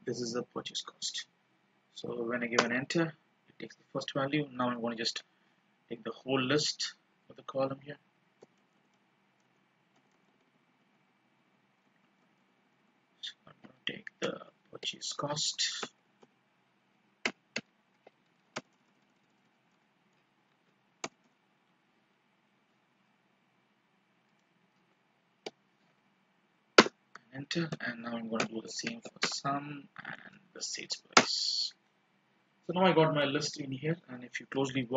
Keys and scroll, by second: 4.6 F2, 6.8 ctrl+shift+Down, 25.2 ctrl+shift+Down, 30.4 ctrl+shift+Down.